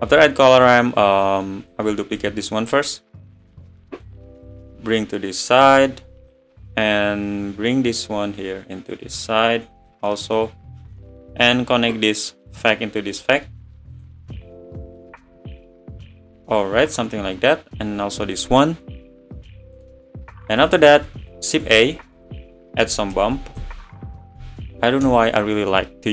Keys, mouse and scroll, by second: 2.2 shift+d, 13.3 click, 16.5 drag.